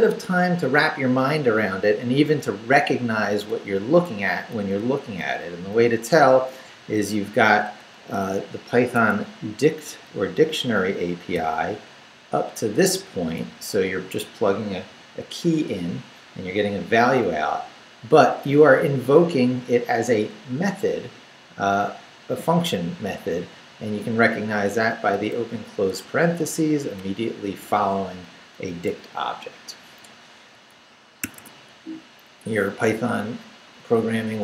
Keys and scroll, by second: 1.9 Down, 2.8 Left, 3.2 Right, 3.5 Left, 3.8 Right, 4.1 Left, 4.5 Right, 4.8 Left, 8.1 Left, 9.0 Escape, 9.3 Right, 10.1 Left, 11.3 v, 11.5 Right, 13.7 Left, 18.4 Right, 23.5 Left, 24.9 Right, 25.3 Left, 25.5 Right, 25.9 Left, 26.2 Right, 26.4 Left, 28.9 Left, 30.5 Right, 31.2 Escape, 31.7 Up.